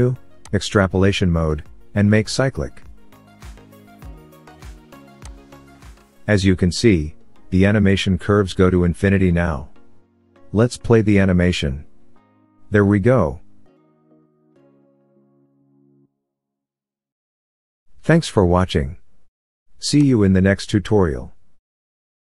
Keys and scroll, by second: 11.3 space.